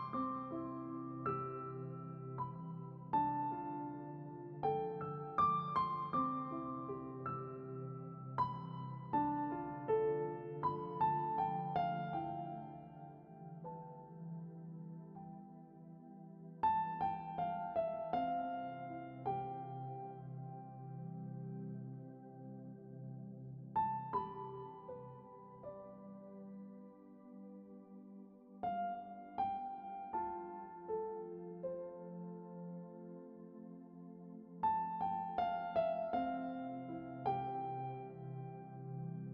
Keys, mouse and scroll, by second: 1.7 middle click, 2.2-2.6 scroll up 2, 2.6 ctrl+r, 3.6 middle click, 3.8 ctrl+r, 4.8 middle click, 5.0 ctrl+r, 6.3-6.7 scroll up 2, 6.4 middle click, 6.7 ctrl+r, 7.4 scroll down 2, 7.6 middle click, 7.7 scroll up 2, 7.8 ctrl+r, 8.6 ctrl+r, 9.0 middle click, 9.4 scroll down 2, 9.5 shift+middle click, 9.7 scroll up 1, 9.7 middle click, 10.0 alt+click, 10.1 alt+click, 10.4 KP_1, 10.6 z, 10.7-11.3 scroll up 1, 11.3 g, 11.5 z, 11.7 scroll up 1, 11.8 shift+middle click, 12.5 ctrl+r, 13.1 ctrl+r, 13.7 shift+middle click, 14.6 scroll up 2, 14.8 ctrl+r, 15.7 scroll down 2, 15.8 middle click, 16.0 scroll up 3, 16.2 z, 16.4 middle click, 16.5 ctrl+r, 17.2-18.0 scroll down 8, 17.6 z, 18.0 Tab, 18.2 middle click, 18.9-19.4 scroll up 3, 19.1 shift+middle drag, 19.4-20.1 middle drag, 20.1 right click, 21.1 Tab, 21.3 click, 21.8 l, 22.1 scroll up 1, 22.7 g, 23.8 s, 24.8 g, 26.4 scroll down 3, 27.3-27.6 scroll up 1, 27.6-28.6 middle drag, 28.6 Tab, 29.1-30.3 middle drag, 30.3 scroll up 1, 30.4 Tab, 30.7 shift+middle click, 31.2 middle click, 31.9 3, 32.0 click, 32.9-34.6 right drag, 34.6 1, 35.0 scroll down 2, 35.3 Tab, 35.6-37.2 middle drag, 37.2-38.0 scroll up 5, 37.3 Tab, 38.0-39.3 middle drag.